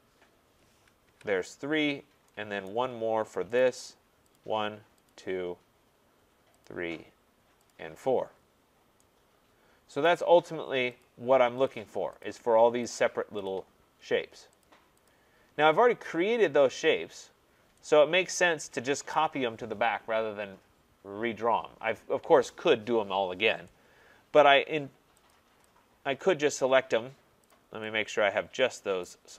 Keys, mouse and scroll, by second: 1.1 Return, 1.9 middle click, 2.0 middle click, 2.6-3.6 scroll, 2.7 right click, 3.6 right click, 4.3 click, 5.1 click, 6.6 click, 7.7 click, 8.3 middle click, 8.4 middle click, 8.4 middle click, 10.0 right click, 11.0 click, 11.7 click, 12.2 click, 12.9 click, 13.5 click, 14.6 click, 15.1 click, 19.1 right click, 24.4 right click, 25.3 click, 26.5 click, 27.5 click, 29.0 right click.